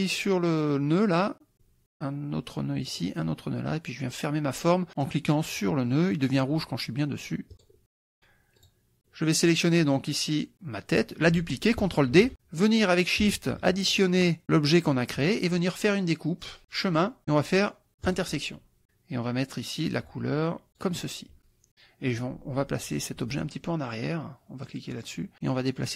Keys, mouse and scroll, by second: 1.5 click, 2.9 click, 7.5 click, 8.6 click, 9.8 click, 12.2 ctrl+d, 14.3 shift+click, 16.7 click, 18.1 click, 20.8 click, 25.0 click, 25.8 click.